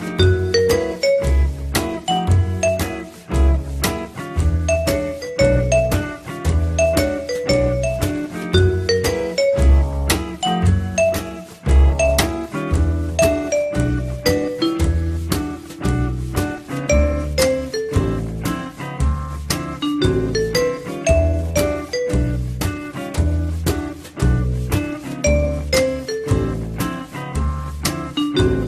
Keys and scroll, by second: 0.2 2, 13.0 t, 25.5 2, 27.1 alt+r.